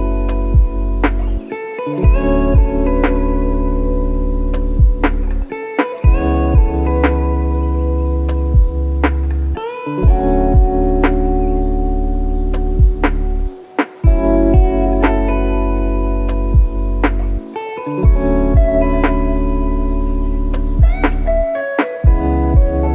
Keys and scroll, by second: 11.0 F3, 12.2 ctrl+j, 18.4 F1.